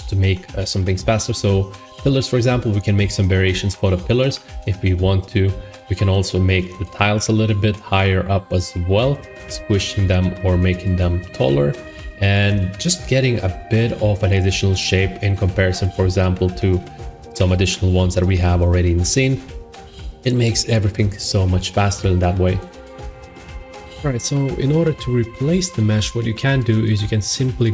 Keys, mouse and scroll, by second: 5.4-7.5 drag, 11.7-13.7 drag, 14.8 click, 15.0 middle click, 15.2 middle click, 15.7 middle click, 17.2 shift+middle click, 19.3 shift+middle click.